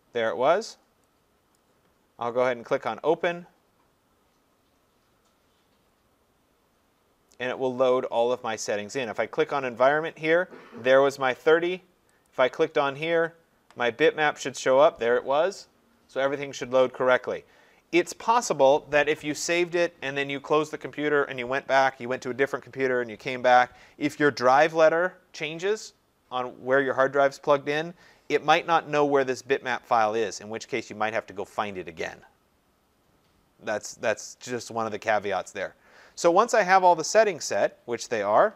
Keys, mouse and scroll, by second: 1.6 click, 9.2 click, 12.3 click, 37.6-38.5 drag.